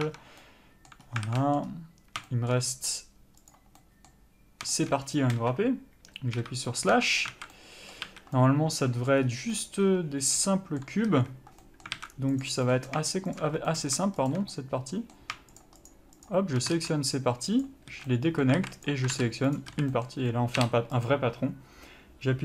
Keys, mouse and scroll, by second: 0.1 click, 0.4 Tab, 0.7 middle click, 1.3 scroll up 1, 1.6 alt+a, 1.7 middle click, 2.6 shift+middle click, 3.0 scroll up 1, 3.8 click, 4.1 middle click, 5.1 shift+middle click, 5.7 KP_0, 6.7 KP_Divide, 7.3 Tab, 7.4 scroll down 1, 7.6 alt+a, 7.8 middle click, 8.4 a, 8.7 middle click, 9.5-9.8 scroll up 1, 9.9 middle click, 11.4 a, 11.9 middle click, 12.3 alt+a, 12.6 click, 13.0 middle click, 13.7 shift+click, 13.9 scroll down 1, 14.0 middle click, 14.6 shift+click, 14.8 middle click, 15.9 shift+click, 17.9 ctrl+e, 18.2 a, 18.4 middle click, 18.9 alt+a, 19.1 click, 19.9 ctrl+e, 20.0 a, 20.2 middle click, 21.4 u.